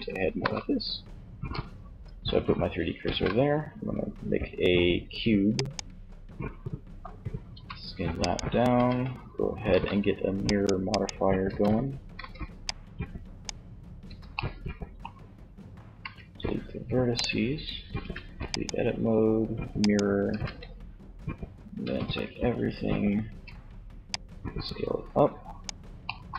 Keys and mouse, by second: 2.1 shift+a, 6.6 s, 7.4 click, 7.9 Tab, 8.9 ctrl+r, 10.6 z, 11.3 b, 13.2 b, 15.2 x, 17.1 Tab, 18.1-19.3 drag, 19.4 Tab, 20.8 a, 21.4 a, 22.5 a, 23.4-25.0 drag, 26.1 a.